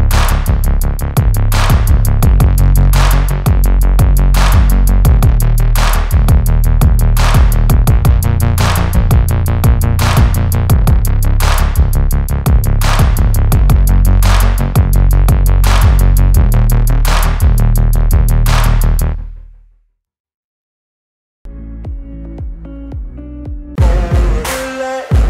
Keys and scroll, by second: 10.6 space, 13.8 space, 16.1 space, 18.6 Delete, 23.6 Delete.